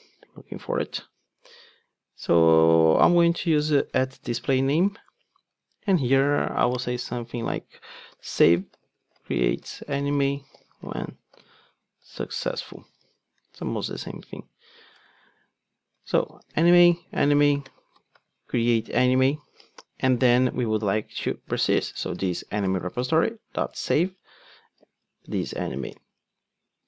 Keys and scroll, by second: 5.1 Return, 14.0 Tab, 18.6 Return, 25.8 alt+Return.